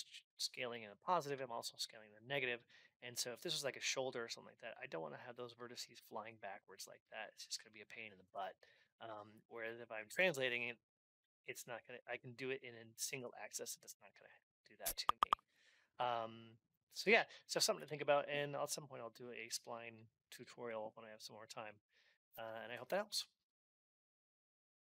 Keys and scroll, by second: 8.0 Return, 17.4 alt+x.